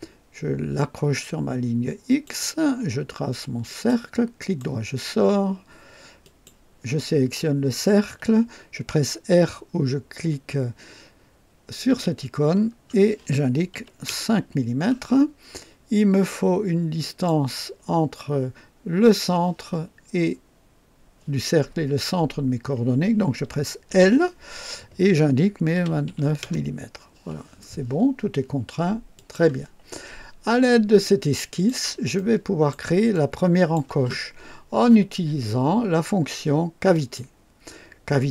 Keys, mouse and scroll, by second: 2.0 click, 3.6 click, 4.3 right click, 6.1 click, 11.8 r, 13.7 KP_5, 14.0 KP_Enter, 16.9 click, 23.8 l, 25.7 KP_2, 26.0 KP_9, 26.3 KP_Enter, 29.1 click, 30.5-31.8 drag, 32.1 right click, 33.0 click, 36.9 click.